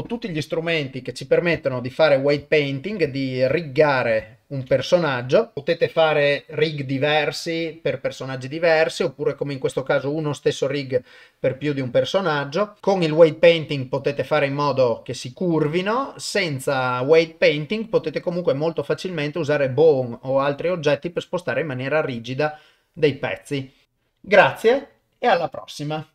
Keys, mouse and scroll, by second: 1.7 ctrl+middle click, 2.5 shift+middle click, 3.1 ctrl+middle click, 3.6 ctrl+shift+middle click, 3.7 shift+click, 4.0 shift+middle click, 4.3 ctrl+middle click, 4.8 ctrl+shift+middle click.